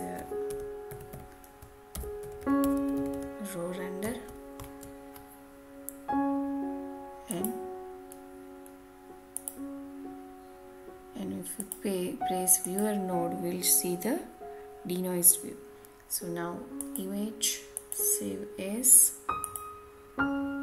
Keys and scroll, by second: 3.9 Return.